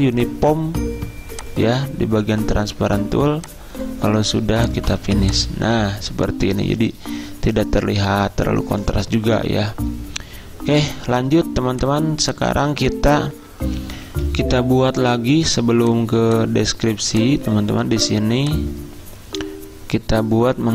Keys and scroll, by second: 13.4 F10, 14.6 z, 17.1 z.